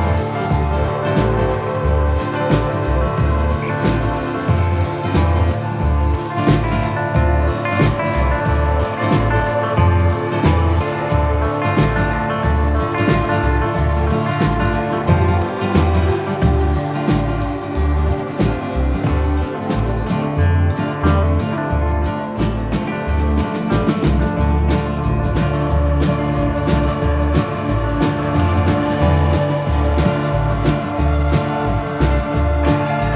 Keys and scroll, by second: 20.0 F3, 20.4 Escape, 28.5 ctrl+z.